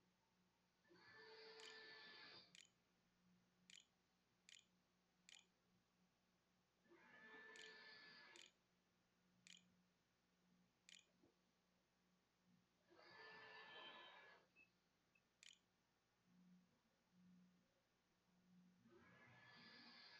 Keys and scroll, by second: 0.0-1.3 typing, 1.9 Delete, 2.8 shift+Return, 3.0 shift+', 3.5 shift+[, 4.0 ', 4.0 Return, 5.1 Return, 5.4-9.5 typing, 10.7 Tab, 15.2 space, 19.7-20.1 typing.